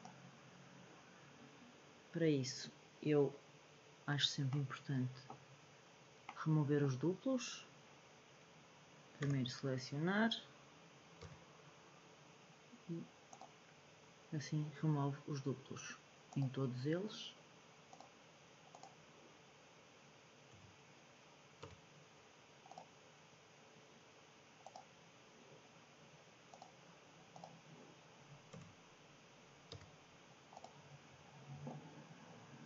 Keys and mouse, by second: 4.5-5.3 middle drag, 6.2 middle click, 9.2 a, 11.2 m, 16.2 click, 20.5 a, 21.5 m, 24.6 click, 27.5 click, 28.5 a, 29.6 m.